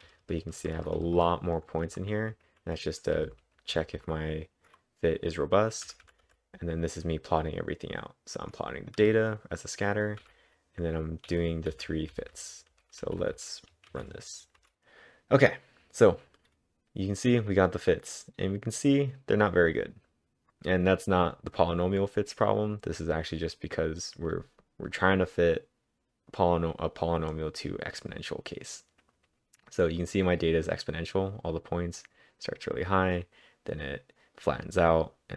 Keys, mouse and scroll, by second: 0.4-1.2 typing, 2.9-3.7 typing, 5.8-6.8 typing, 9.4-13.8 typing, 13.9 ctrl+`, 14.6 Up, 14.7 Return, 14.7-17.3 drag.